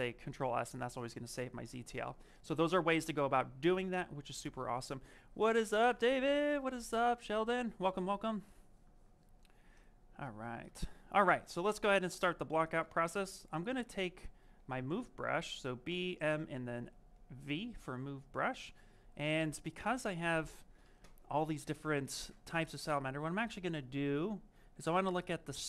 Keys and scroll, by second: 18.3 s.